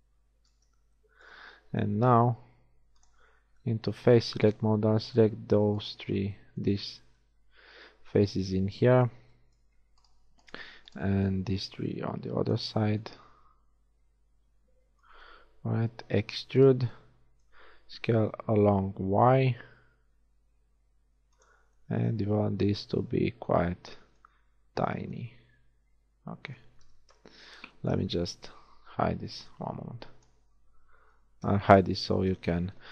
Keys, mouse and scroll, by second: 2.0 ctrl+Tab, 4.8 click, 13.5-15.9 middle drag, 16.3 e, 18.3 s, 21.8-23.6 middle drag, 27.2 KP_1, 28.1 z, 28.5 a, 29.3 b, 31.5 h, 32.5 z.